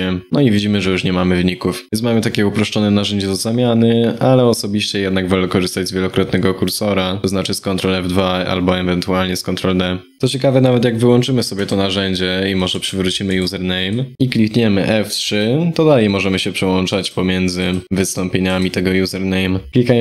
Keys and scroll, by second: 19.7 shift+F3.